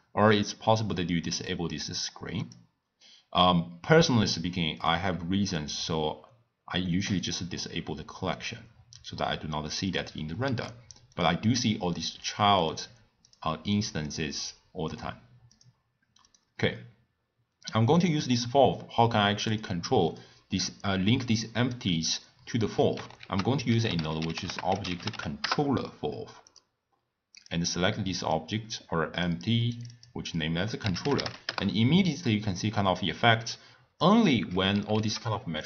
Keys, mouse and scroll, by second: 1.2-4.8 drag, 7.1 click, 8.3 click, 9.8 click, 10.4 s, 11.8 click, 12.2 click, 12.6 click, 13.2 click, 13.7 click, 14.0 click, 14.9 click, 15.5 click, 16.2 click, 17.9-19.6 drag, 20.1 click, 23.2 ctrl+a, 27.3-29.8 drag, 29.9-32.9 drag, 33.5-34.9 drag, 34.9 ctrl+a.